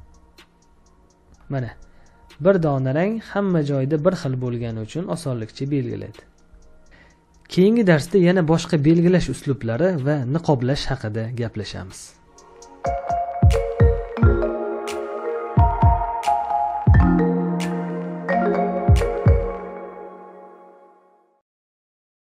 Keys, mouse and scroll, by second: 1.8 space, 2.5 space, 5.0 space.